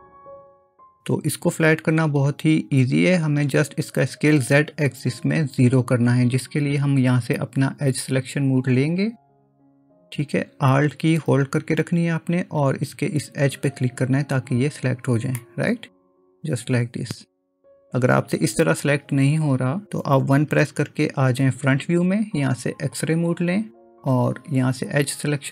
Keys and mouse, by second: 0.1 ctrl+space, 0.1 click, 15.4-17.7 middle drag, 20.5 KP_1, 23.1 click.